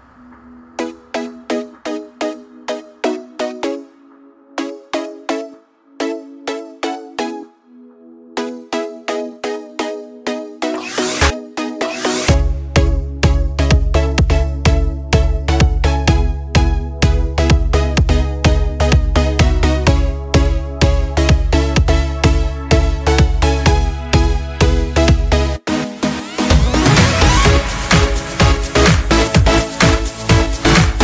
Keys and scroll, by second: 1.4 ctrl+v, 2.4-3.9 ctrl+v, 5.6 ctrl+space, 14.0-15.4 typing, 15.8 Return, 26.7 ctrl+Return, 28.3 ctrl+x.